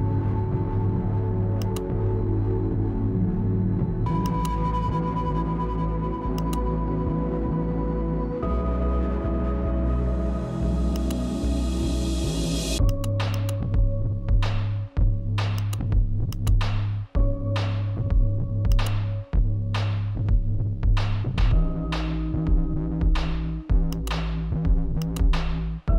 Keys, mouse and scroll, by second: 0.0 shift+Page_Up, 1.9-6.1 shift+drag, 8.2 e, 10.8 click, 13.1 shift+click, 13.1-15.3 shift+drag, 18.3 click, 18.9 Left, 23.4-25.9 drag.